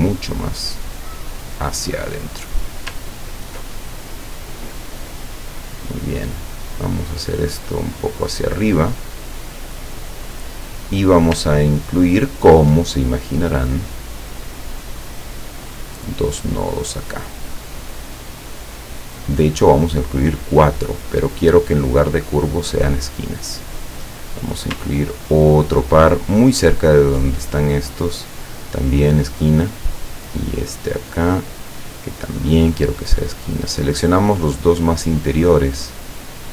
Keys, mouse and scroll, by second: 3.2 ctrl+scroll down 1, 7.5-10.4 drag, 11.8-12.4 ctrl+scroll up 4, 13.3 ctrl+scroll up 3, 14.8 click, 16.3 click, 19.0 click, 20.7 click, 22.6 click, 25.0-25.6 ctrl+scroll up 4, 27.4 click, 29.1 click, 30.6 click, 32.5 click, 33.2 click, 33.7-35.1 drag.